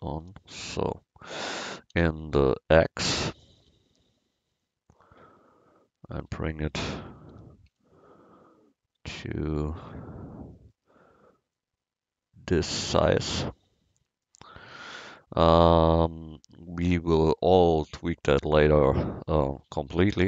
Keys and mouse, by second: 0.3 n, 1.7 s, 7.4 s, 11.6-12.7 middle drag, 12.7-14.3 drag.